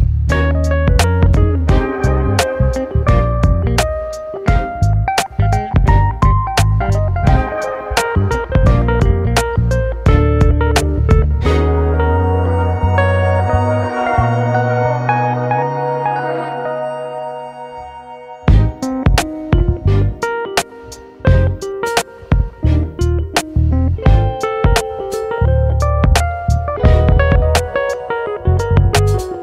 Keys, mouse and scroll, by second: 1.1 ctrl+r, 4.4 middle click, 5.3 ctrl+r, 7.9 click, 9.2 KP_7, 9.7-10.1 scroll down 10, 10.1 shift+middle click, 10.6-11.6 scroll up 6, 11.6-13.0 shift+middle drag, 13.0 2, 13.4 click, 14.3 alt+shift+click, 15.3 x, 16.1 alt+shift+click, 16.5-19.8 middle drag, 19.8 ctrl+b, 23.8 click, 24.3 alt+shift+click, 24.8 ctrl+KP_Add, 25.3 ctrl+i, 26.7 i, 28.8 Tab.